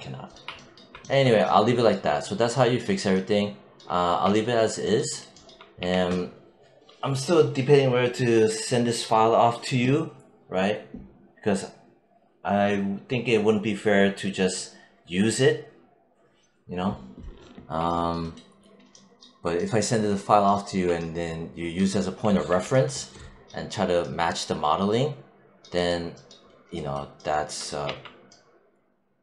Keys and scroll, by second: 5.7 w, 22.3 alt+5, 27.7 1.